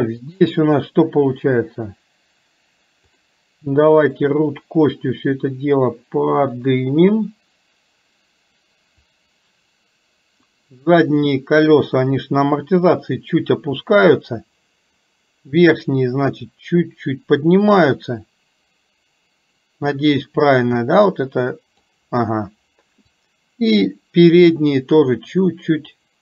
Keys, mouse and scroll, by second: 0.5 click, 4.4-9.2 drag, 10.6 click, 12.0 click, 12.2-13.9 drag, 15.2 click, 16.7-21.9 drag, 23.1 click, 24.6 click, 25.3-26.2 drag.